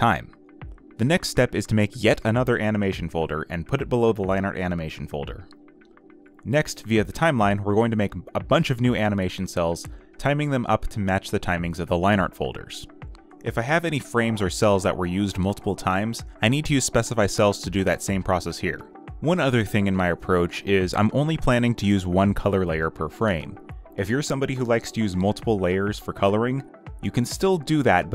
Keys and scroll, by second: 1.0-2.5 typing, 15.0 ctrl+z, 17.8 ctrl+z.